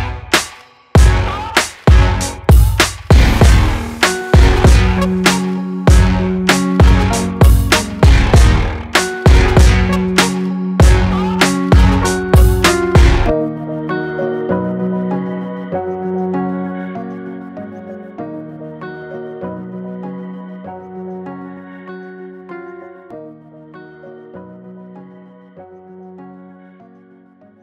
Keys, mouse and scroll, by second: 6.7-7.5 typing, 7.0 click, 16.0 ctrl+z, 17.3 click, 21.5 click, 26.2 right click.